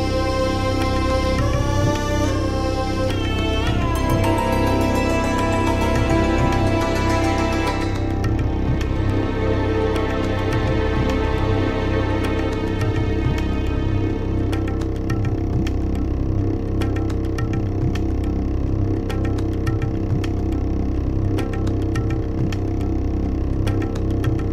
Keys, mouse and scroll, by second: 0.3 ctrl+scroll down 2, 1.1-1.5 ctrl+scroll down 1, 1.5 middle click, 1.9 ctrl+s, 3.2 click, 5.3 click, 6.4-8.8 typing, 9.5 click, 10.1 click, 12.0 s, 12.6 o, 13.5 i, 15.4 click, 23.4 click.